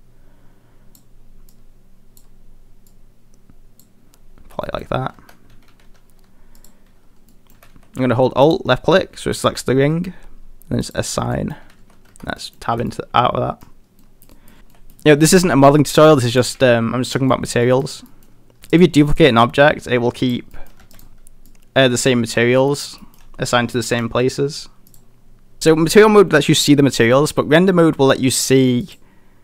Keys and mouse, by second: 4.7 middle click, 5.2 Tab, 5.5 a, 5.7 a, 6.6 alt+click, 7.3 middle click, 7.6 a, 8.2 alt+a, 8.5 alt+click, 9.0 middle click, 11.4 middle click, 11.9 a, 12.1 Tab, 12.4 middle drag, 12.9 middle click, 12.9 a, 14.0 middle click, 14.4 middle click, 14.7 middle drag, 16.3 click, 17.3 middle click, 17.7 shift+middle drag, 18.1 middle drag, 18.6 shift+d, 19.2 click, 20.5 middle click, 21.5 click, 21.5 shift+d, 22.3 s, 23.0 middle drag, 23.5 middle drag, 23.9 shift+middle drag.